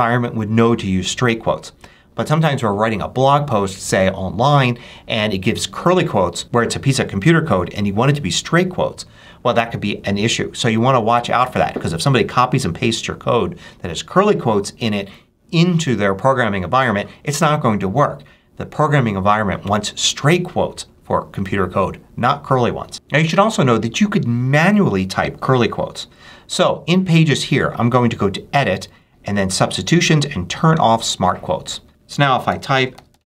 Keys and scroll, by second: 31.9 super+BackSpace, 32.1-33.3 typing.